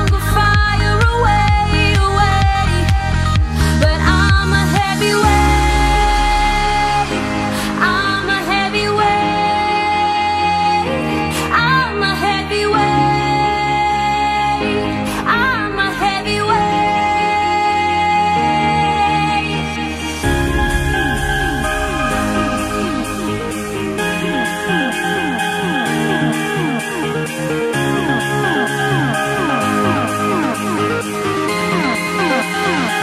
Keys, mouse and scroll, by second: 0.6-4.7 drag, 4.7-5.1 scroll down 4, 5.1-6.1 middle drag, 6.1 ctrl+z, 6.5 ctrl+z, 7.4-8.9 scroll up 2, 11.6-17.3 drag, 19.7-22.9 drag, 23.5 click, 24.0 click, 24.5 click, 25.1-25.4 scroll down 1, 25.8-26.2 scroll down 3, 27.8-31.3 drag, 31.3 KP_7, 32.0-32.9 scroll up 4.